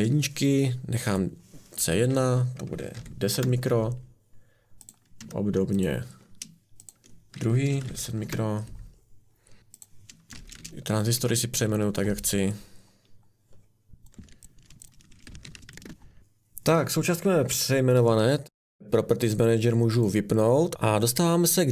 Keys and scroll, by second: 1.8-3.3 typing, 5.2 Escape, 7.6-8.4 typing, 10.6-15.3 typing.